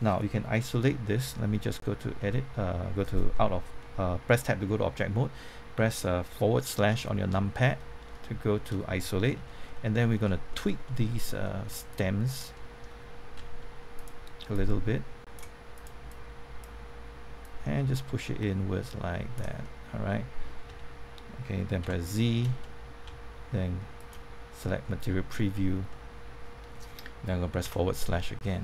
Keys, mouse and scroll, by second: 2.1 Tab, 8.0 middle click, 9.3 Tab, 9.6 middle click, 10.1 shift+middle click, 10.5 middle click, 11.9 click, 12.5 middle click, 13.3 z, 13.9-19.6 drag, 19.6 middle click, 20.6 Tab, 21.8 typing, 23.5-24.5 typing, 24.8 middle click, 27.6 KP_Divide, 28.4 scroll down 1.